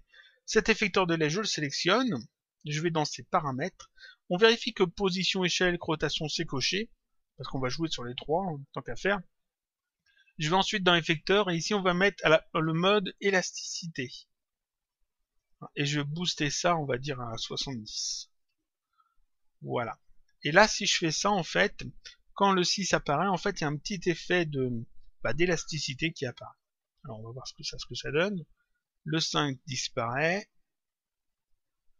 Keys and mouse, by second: 0.3 click, 3.1 click, 10.8 click, 13.3 click, 15.3 click, 16.4 click, 20.0 click, 26.5 click, 27.6 click.